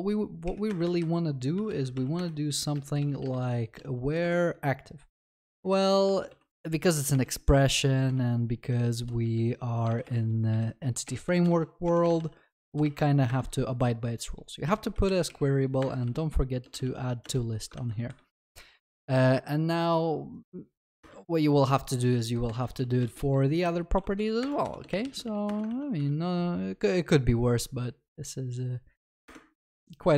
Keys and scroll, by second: 2.2 Return, 9.9 ctrl+BackSpace, 13.2 ctrl+BackSpace, 17.7 ctrl+s, 23.0 Return, 25.7 ctrl+s.